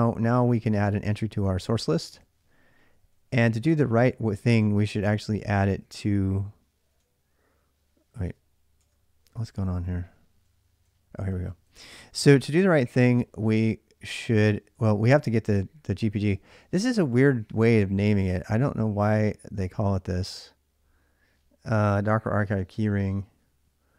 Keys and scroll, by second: 0.0-7.7 typing, 1.0 ctrl+a, 1.2 ctrl+a, 8.0 Return, 8.6 Return, 9.2 ctrl+[, 9.2 ctrl+j, 10.4-15.7 typing.